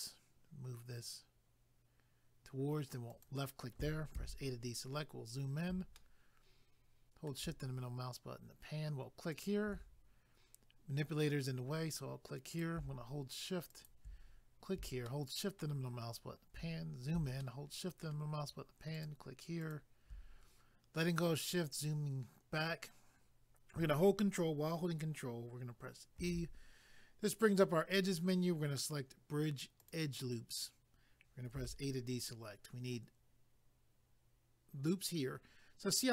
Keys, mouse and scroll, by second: 3.1 click, 3.2 click, 4.1 a, 4.6-5.1 scroll up 1, 6.0 shift+middle click, 7.7 scroll up 1, 9.3 click, 9.4 click, 12.5 click, 13.7 shift+click, 14.2 scroll down 1, 15.2 shift+middle click, 16.7 scroll up 1, 17.4 shift+middle click, 19.0 shift+click, 19.0 shift+click, 19.6 shift+click, 19.7 shift+click, 21.1 scroll down 1, 26.2 ctrl+e, 29.8 click, 29.9 click, 31.5 a.